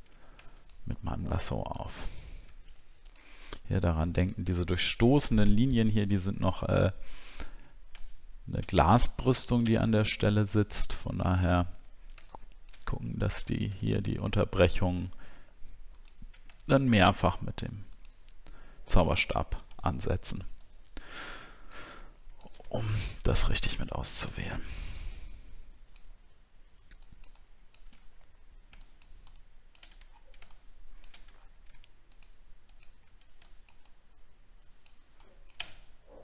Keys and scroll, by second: 13.3 alt+scroll up 1, 19.3 alt+scroll down 1, 30.1 alt+scroll down 1, 31.4 alt+scroll up 1.